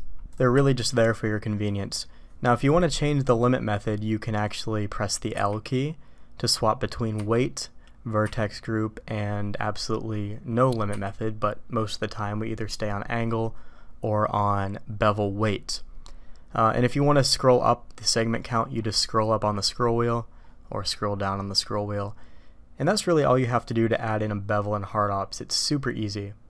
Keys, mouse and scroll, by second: 0.5 q.